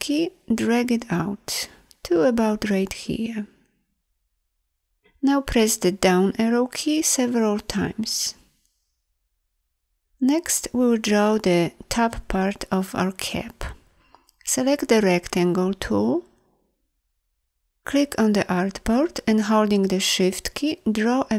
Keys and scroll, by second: 5.8 Down, 14.4 m.